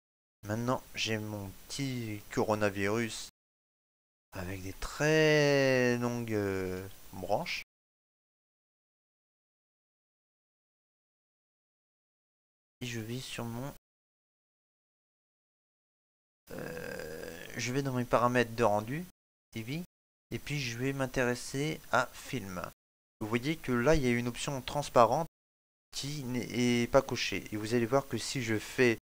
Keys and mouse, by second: 2.5 shift+middle click, 3.0 ctrl+middle click, 4.9 middle click, 6.8 shift+middle click, 7.3 ctrl+middle click, 7.8 middle click, 12.7 click, 13.0 click, 16.1 click, 17.9 click.